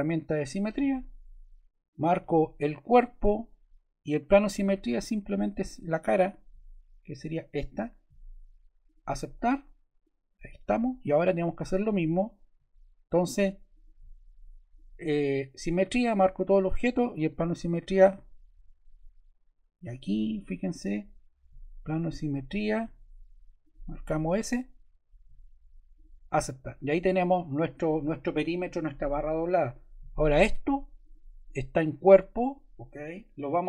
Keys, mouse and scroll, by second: 0.4-1.6 drag, 1.8-3.0 drag, 7.2-8.4 drag, 25.8 click, 30.9 click, 31.8 click.